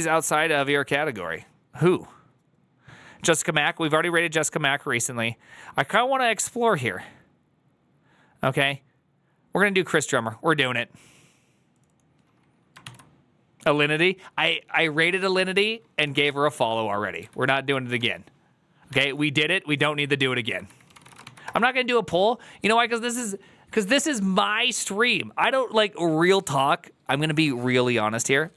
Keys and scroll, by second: 16.2 ctrl+c, 16.2 alt+{, 17.1 [, 18.8 alt+[, 20.1-21.4 typing.